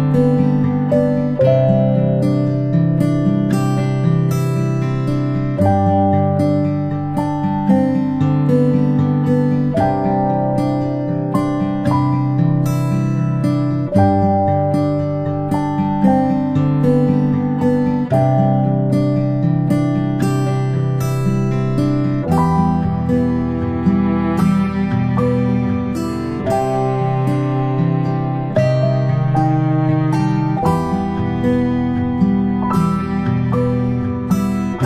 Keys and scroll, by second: 0.0 p, 27.8-28.1 shift+space, 31.2 g.